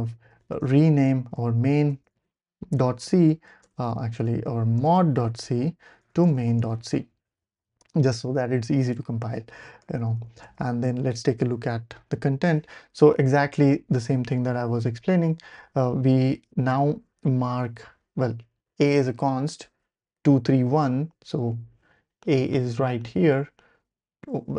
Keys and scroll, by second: 0.1-7.1 typing, 1.3 Tab, 7.8 ctrl+l, 9.5-10.7 typing, 10.9 Return, 14.5 ctrl+alt+super+p.